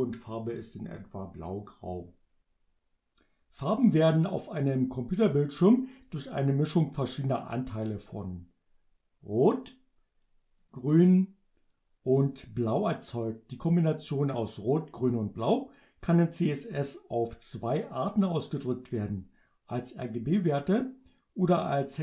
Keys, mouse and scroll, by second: 9.4 click, 10.6 click, 12.3 click.